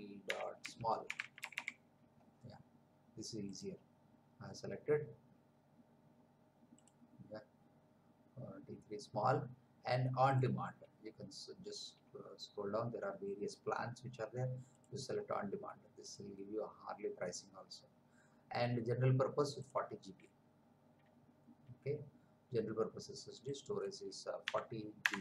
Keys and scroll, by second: 0.0-1.9 typing, 24.4 4, 25.0 0.